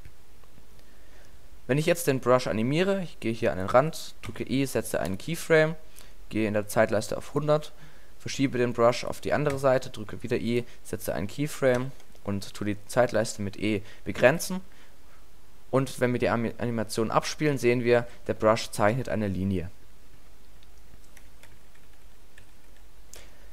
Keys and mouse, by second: 4.3 click, 7.3-10.6 drag, 9.5 i, 11.8 e, 14.2 alt+a, 17.9 alt+a, 18.5-19.0 drag, 21.5-22.1 ctrl+z, 22.4 ctrl+z.